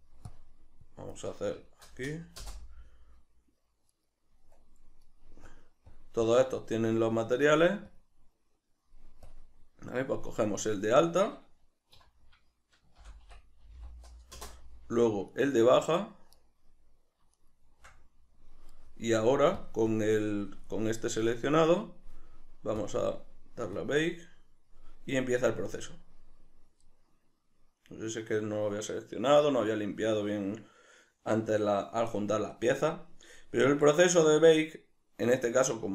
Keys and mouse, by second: 2.4 Return, 3.9 right click, 5.4 click, 5.9 click, 6.2 click, 6.6 drag, 7.2-8.0 drag, 8.6-9.3 drag, 10.4 click, 12.0 F2, 14.4 Return, 15.3 shift+right click, 16.3 right click, 17.3 shift+right click, 19.5 click, 19.9-22.9 drag, 23.8 click.